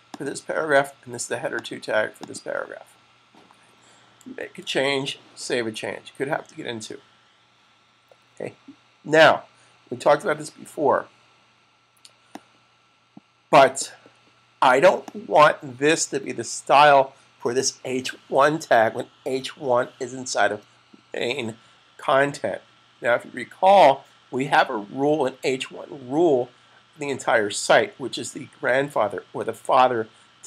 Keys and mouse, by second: 4.2 super+s, 12.1 click, 14.9 click.